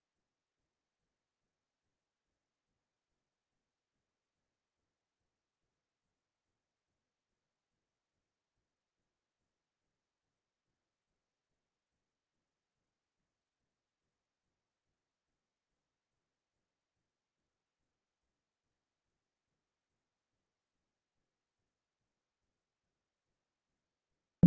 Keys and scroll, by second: 3.3 ctrl+c, 9.0 ctrl+v.